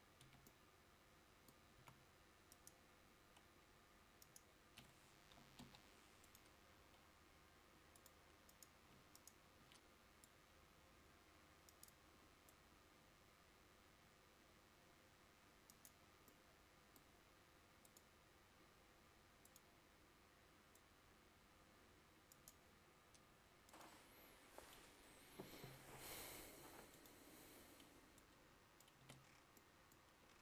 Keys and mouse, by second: 0.3 Tab, 2.0 a, 5.4 click, 5.7 Delete, 9.2-30.4 drag, 9.2-29.0 right drag, 29.2 Tab.